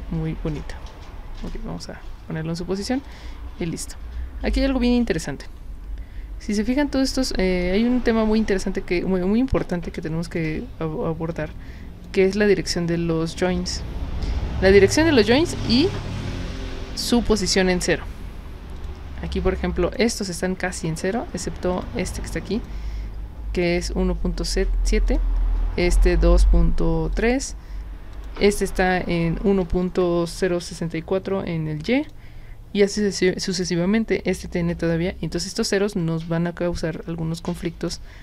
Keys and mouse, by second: 0.0-2.3 typing, 3.1 click, 7.7 space, 8.5 click, 11.3-12.0 drag, 18.8 click, 19.3-19.9 drag, 21.7 click, 22.5 click, 25.1 drag, 27.1 click, 28.2 click, 32.0 click, 33.5 click, 37.8 click.